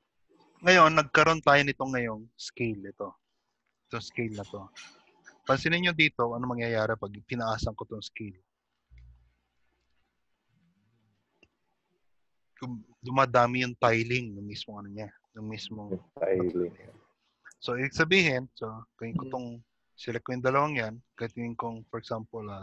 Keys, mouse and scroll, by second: 2.1-2.9 scroll up 2, 5.4-5.7 scroll up 9, 7.7 click.